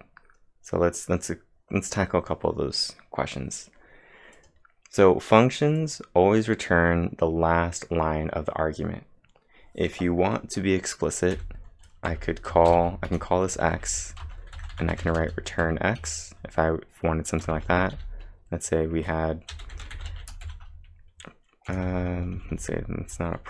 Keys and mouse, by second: 0.5-1.2 typing, 4.4 click, 5.8-6.5 typing, 11.1-18.1 typing, 11.3 click, 18.9 Return, 19.6-20.9 typing.